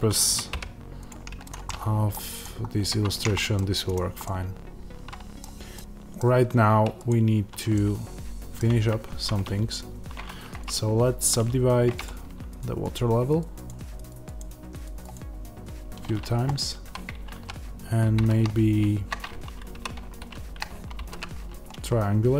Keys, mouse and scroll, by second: 0.1 click, 0.4 g, 1.0 click, 1.6 middle click, 2.2 click, 2.6 scroll down 1, 3.3 middle click, 3.8 click, 4.2-7.0 middle drag, 7.0 click, 7.6-8.9 middle drag, 8.5 scroll down 1, 8.9 Tab, 11.9 right click, 19.6-22.3 right drag, 19.6 3.